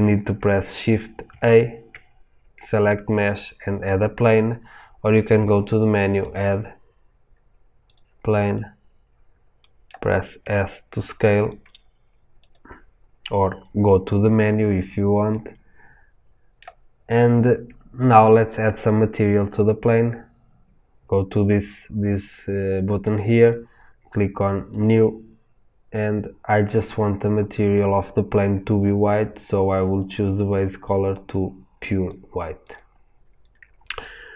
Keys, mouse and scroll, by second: 7.9-8.5 drag, 8.5-24.8 middle drag, 10.4 s, 24.8-25.4 drag.